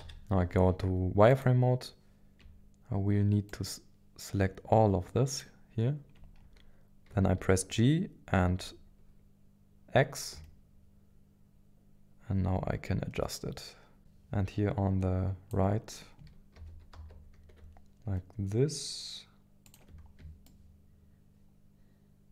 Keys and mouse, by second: 0.0 z, 3.6-5.4 shift+drag, 7.1 g, 8.3 x, 14.0-15.5 drag, 16.5 g, 16.9 x, 20.4-22.3 shift+middle drag.